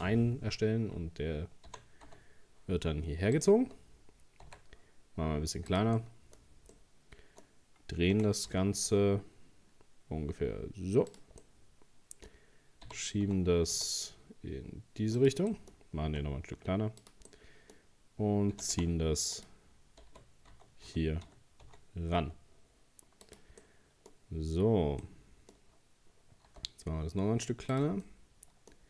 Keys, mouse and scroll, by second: 1.7 g, 3.7 scroll down 1, 4.5 s, 6.0 middle click, 6.4-6.7 scroll up 4, 6.7-8.1 middle drag, 8.1 r, 11.4-12.9 middle drag, 12.9 g, 15.5 middle click, 16.1 s, 17.3-18.5 middle drag, 18.5 g, 20.1 g, 23.6 middle click, 24.3-25.0 scroll up 2, 25.0-26.5 middle drag, 26.5 s, 28.0 middle click.